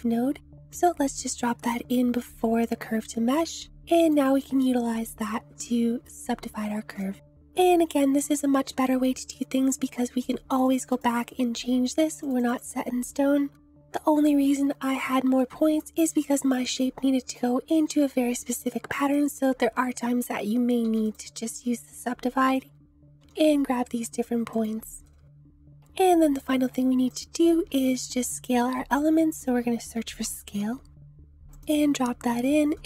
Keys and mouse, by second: 7.0-7.5 drag, 10.5 click, 12.4 click, 14.4 Tab, 14.9 middle click, 15.8 click, 15.9 g, 19.0 click, 20.8 a, 21.2 click, 22.5 click, 23.2 g, 24.5 click, 25.5 ctrl+z, 25.7 ctrl+z, 27.7 shift+a.